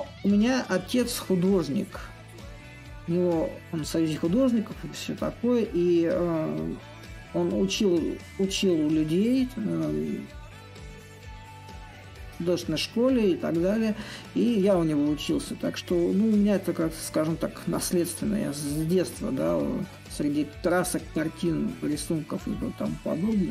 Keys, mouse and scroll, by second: 0.5 middle click, 1.0 right click, 1.3-3.6 middle drag, 3.8-6.5 drag, 11.8-18.0 shift+drag, 18.5-23.5 drag.